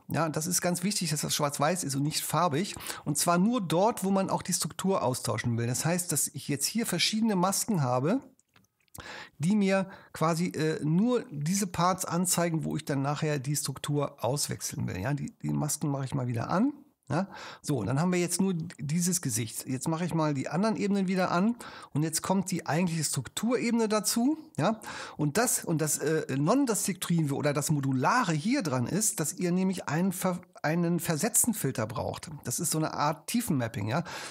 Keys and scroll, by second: 8.8 shift+super+0.